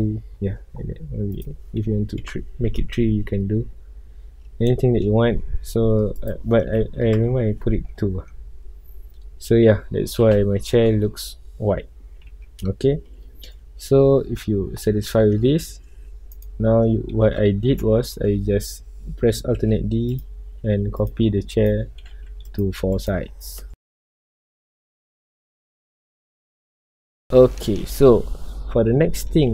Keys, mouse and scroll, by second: 1.8 click, 2.5 KP_Enter, 3.2 middle click, 3.8 scroll up 2, 4.6-7.1 middle drag, 7.1 click, 7.2 KP_Enter, 8.0 scroll down 2, 8.6-10.3 middle drag, 12.3-13.4 middle drag, 13.4 scroll up 2, 15.3 scroll down 1, 16.5 click, 17.2 KP_7, 18.0-19.7 shift+middle drag, 19.7 alt+d, 20.1 click, 20.3 r, 21.0 click, 21.1 g, 21.6 click, 22.0 r, 22.5 click, 22.6 g, 23.0 click, 23.5 alt+d, 23.7-26.4 typing, 24.1 click, 24.3 alt+d, 25.2 click, 25.8 click, 26.0 click, 26.6 click, 26.8-27.2 middle drag, 27.2 scroll up 1, 27.6-28.2 middle drag, 28.2 scroll up 1, 28.7 scroll down 1, 29.0-29.5 middle drag.